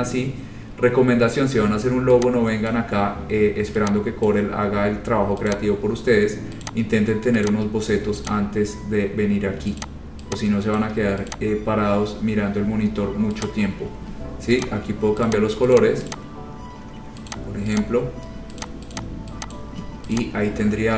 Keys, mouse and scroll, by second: 0.0 click, 0.2-1.9 scroll, 2.9 click, 2.9 scroll down 6, 4.4 click, 5.6 click, 5.8-6.4 scroll, 6.8 click, 7.6 shift+click, 7.9 scroll, 8.5 click, 8.7 scroll, 9.9 click, 10.9 shift+click, 11.4 click, 11.7-12.2 scroll, 13.6 click, 14.8 click, 14.8 scroll down 4, 15.4 click, 15.6 shift+click, 16.0 click, 16.3 click, 16.9 scroll, 17.5 click, 17.9 click, 18.4 scroll, 18.8 shift+click, 18.9 shift+click, 19.1 click, 19.2 shift+click, 19.7 click, 20.3 click.